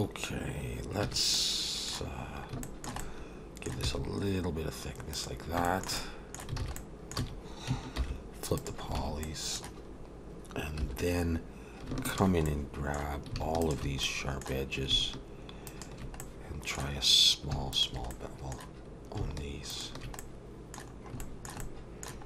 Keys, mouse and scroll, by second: 1.0 a, 1.3 middle click, 2.6 shift+middle click, 3.0 middle click, 3.8 e, 5.7 middle click, 6.0 middle click, 6.6 alt+a, 6.8 middle click, 7.2 a, 8.0 alt+n, 9.0 alt+a, 9.2 middle click, 9.9-10.4 scroll up 2, 10.8 2, 11.2-11.9 scroll up 1, 11.9 scroll up 1, 12.1 alt+shift+click, 12.5 middle click, 13.6 alt+shift+click, 14.0 middle click, 15.7 alt+shift+click, 16.2 middle click, 17.7 alt+shift+click, 18.1 middle click, 19.7 alt+shift+click, 20.2 middle click, 20.9 scroll down 3, 21.2 shift+middle click, 21.6 middle click.